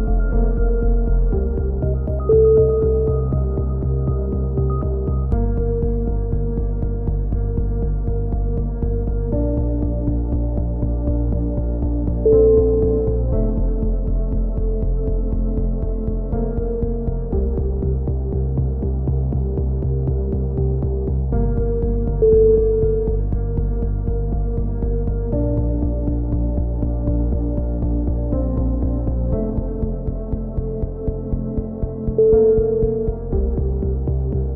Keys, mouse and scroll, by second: 3.0-4.0 drag, 4.3 middle click, 5.3 click, 6.7-8.6 middle drag, 8.6 click, 11.5-12.6 middle drag, 11.8 x, 13.0-15.0 middle drag, 13.6 a, 15.0 click, 16.0 Tab, 18.0-21.2 drag, 20.5 t, 21.5 ctrl+KP_1, 21.9 Tab, 22.4 z, 22.7 z, 22.9 Tab, 23.2 Tab, 23.7 a, 24.6 z, 24.9 b, 26.5 l, 27.4 middle click, 27.8-28.8 drag, 29.1 x, 31.3 click, 32.1 middle click, 33.6 l, 34.2 x.